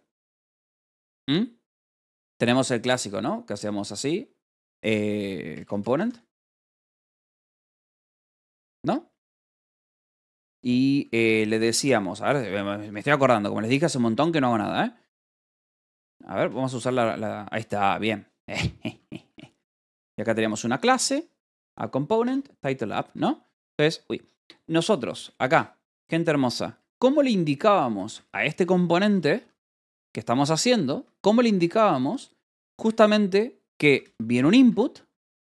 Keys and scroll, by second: 0.2 c, 0.7 Escape, 2.0 a, 3.3-8.6 typing, 9.7 alt+shift+9, 9.9 Escape, 10.3 k, 11.4-13.3 typing, 14.5 Return, 16.8 ctrl+g, 18.4 Escape, 18.5-20.8 typing, 21.9 ctrl+g, 22.6 ctrl+g, 23.3 j, 23.7 Escape, 24.3 k, 25.0 BackSpace, 25.4 Escape, 26.4-29.2 typing, 30.8 Escape, 30.9-33.2 typing, 34.3 c, 34.6 Escape, 35.0 a, 35.3 space.